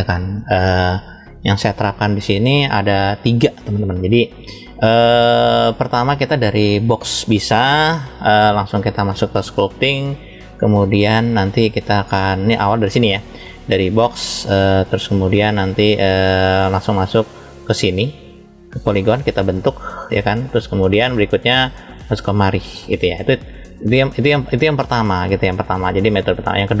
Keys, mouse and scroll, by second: 4.1-6.0 middle drag, 10.1-11.3 middle drag, 11.4 scroll down 1, 12.1 click, 12.9 middle click, 14.2 click, 17.5 click, 19.0 click, 20.1 click, 21.2 click, 22.2 click, 23.3 middle click, 24.4 middle click.